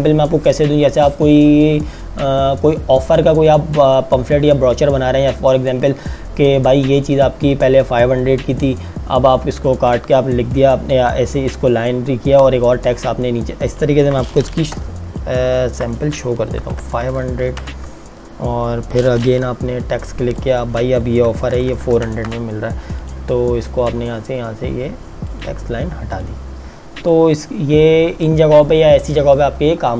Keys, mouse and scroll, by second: 13.9 click, 14.7 t, 15.2 click, 16.6 KP_5, 16.8 KP_0, 17.6 KP_Enter, 19.4 t, 20.4 click, 21.2 KP_4, 21.5 KP_0, 22.0 KP_Enter, 23.2 click.